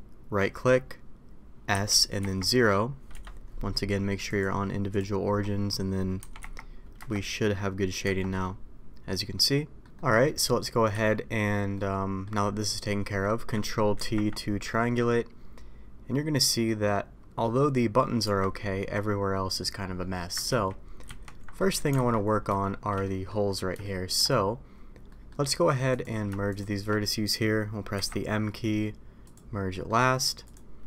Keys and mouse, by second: 4.4 click, 6.2 s, 8.0 Tab, 8.4-9.8 middle drag, 9.9 middle click, 10.9 a, 11.7 middle click, 14.0 ctrl+t, 14.7 middle click, 16.7 middle click, 18.2 Tab, 18.8-19.6 middle drag, 20.0 middle drag, 20.7 ctrl+z, 21.5 middle drag, 21.9 alt+a, 22.6-22.9 shift+middle drag, 23.0 middle drag, 23.8-24.1 shift+middle drag, 25.1 middle click, 27.9 m, 29.7 middle click.